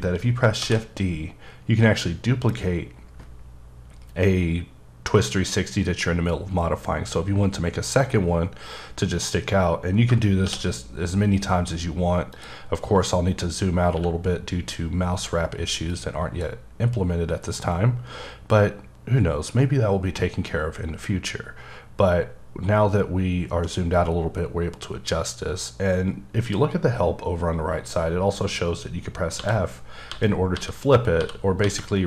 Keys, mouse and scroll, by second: 0.6 shift+d, 10.1 shift+d, 10.4 shift+d, 12.3 click, 12.6 scroll down 3, 13.1-13.9 scroll up 5, 13.9 q, 15.9 click, 29.3-32.0 typing.